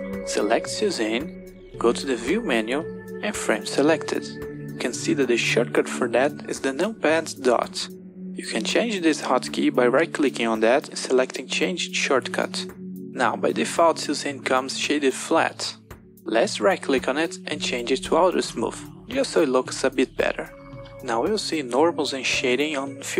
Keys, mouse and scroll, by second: 0.6 click, 2.0-3.4 drag, 9.5-12.7 drag, 16.5-17.7 right drag.